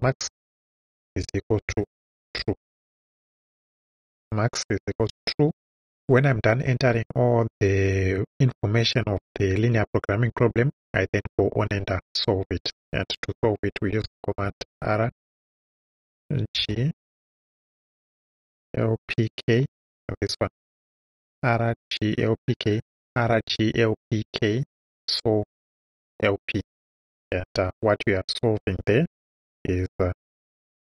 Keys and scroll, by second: 0.0-3.3 typing, 5.0 Return, 14.5 shift+r, 16.6 g, 18.4 l, 29.3 o, 30.5 b.